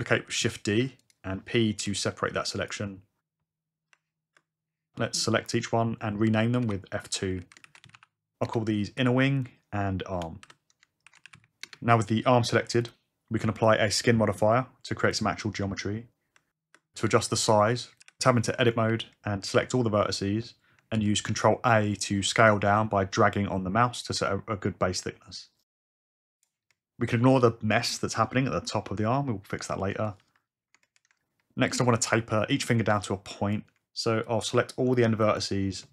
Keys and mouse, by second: 0.2 shift+d, 0.9 click, 1.8 p, 3.9 Tab, 6.2 F2, 6.8 n, 8.9 h, 10.4 F2, 13.5-15.1 drag, 16.3 Tab, 17.3 middle click, 18.0 1, 18.8 a, 20.9 ctrl+a, 25.4 click, 31.7 Tab, 32.3 alt+z.